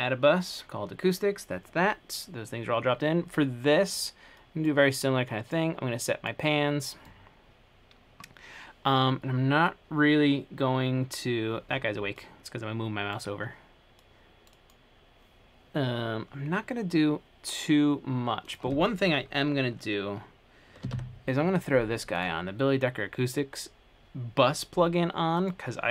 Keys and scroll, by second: 20.8-21.6 typing.